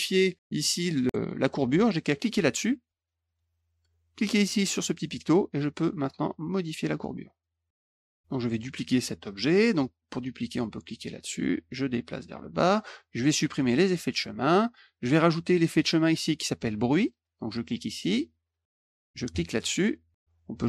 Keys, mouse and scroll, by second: 1.2 click, 2.1 click, 3.2 click, 4.9 click, 6.3-7.4 drag, 7.7 click, 7.9 click, 10.9 click, 11.5-12.6 drag, 13.5 click, 14.1 click, 18.0 click, 19.3 click.